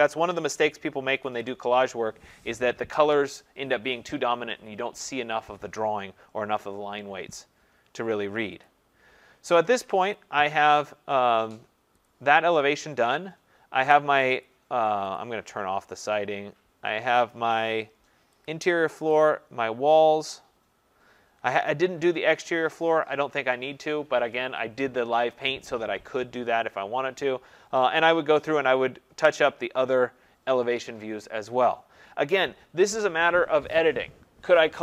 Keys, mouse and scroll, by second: 1.2 ctrl+0, 8.7 click, 10.2 click, 12.1 click, 14.4 click, 15.2 click, 18.5 click, 19.2 click, 32.0 scroll down 1.